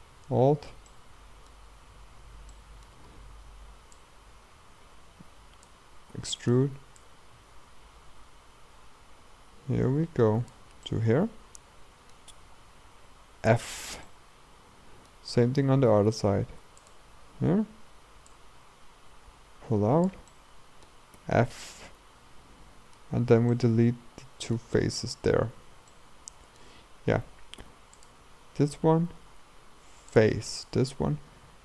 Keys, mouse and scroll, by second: 0.9-4.0 middle drag, 4.0-6.2 drag, 6.2 e, 7.0-10.0 drag, 10.9-12.5 middle drag, 12.5-13.0 scroll down 1, 13.0-13.5 scroll down 1, 13.5 f, 14.1-15.6 middle drag, 15.6-15.9 scroll up 2, 15.9 a, 16.1 a, 16.8-20.3 alt+drag, 20.3 middle click, 21.2 f, 21.7-25.5 middle drag, 25.5-25.9 scroll down 2, 25.9-27.6 middle drag, 27.6 3, 28.0-29.1 drag, 29.1 x, 30.6 click, 31.0 x.